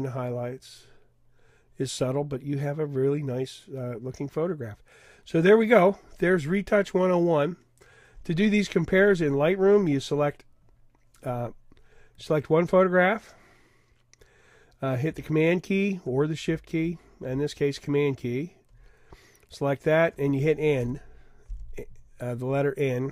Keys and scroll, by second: 20.8 n, 22.1 n.